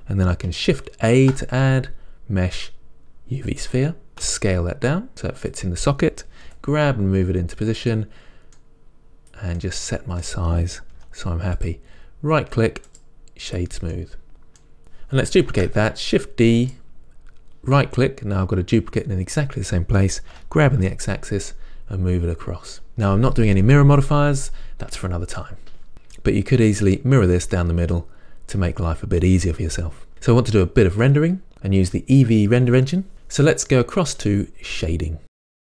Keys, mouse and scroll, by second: 3.9 shift+a, 4.5 s, 5.8 click, 6.1-8.2 middle drag, 6.7 g, 8.2 click, 9.0 middle click, 9.2 s, 9.6 click, 9.8-11.9 middle drag, 11.3 g, 11.9 click, 13.8 right click, 14.2 middle click, 15.8 shift+d, 18.6-34.8 middle drag, 20.7 g.